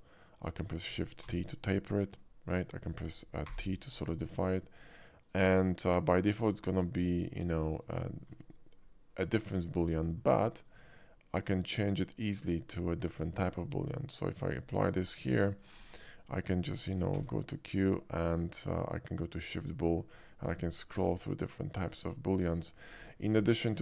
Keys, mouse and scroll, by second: 1.3 shift+t, 3.5 t, 5.3 click, 6.1 click, 7.0-7.4 middle drag, 7.8 shift+middle click, 8.2 shift+middle click, 8.5-9.6 shift+middle drag, 10.0 shift+middle drag, 10.7-11.5 shift+drag, 14.7 shift+click, 15.1 shift+middle click, 15.8 shift+middle drag, 16.3 shift+middle click, 17.2 q, 19.4 click, 20.4-22.9 middle drag, 22.9-23.2 right drag, 23.7-23.8 middle drag.